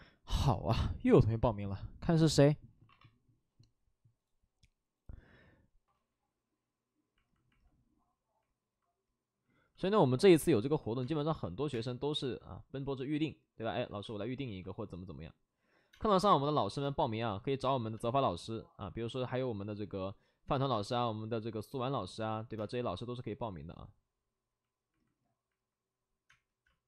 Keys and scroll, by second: 5.8 ctrl+z, 5.8 alt+s, 5.8 space, 5.8 3, 11.0 space, 11.2 1, 11.7 space, 14.0 space, 15.9 space, 16.8 space, 17.2 ctrl+z, 17.9 space, 20.7 space, 22.5 space, 26.3 space.